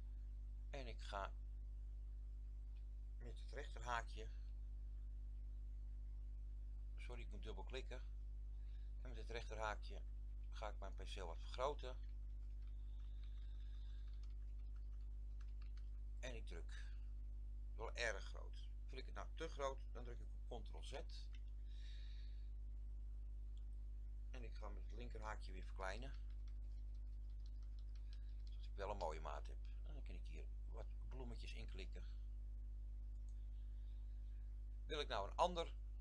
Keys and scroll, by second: 4.1 ], 4.5 ], 5.4 ], 8.9-13.1 typing, 14.1-15.5 typing, 20.8 ctrl+z, 25.3-28.5 typing.